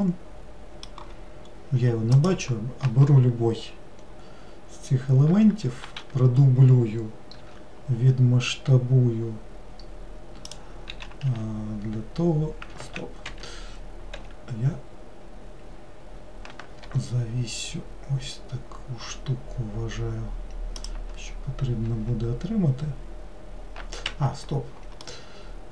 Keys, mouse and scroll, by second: 2.3 click, 6.0 shift+d, 11.0 s, 14.3 s, 22.0 s, 25.1-25.7 middle drag.